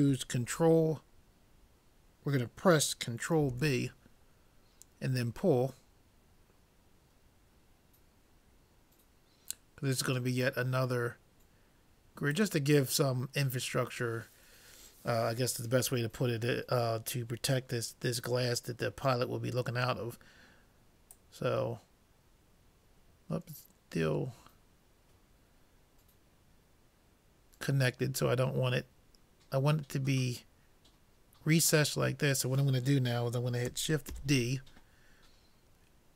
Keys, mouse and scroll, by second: 3.5 ctrl+b, 19.1 middle click, 21.2-23.0 drag, 34.1 shift+d.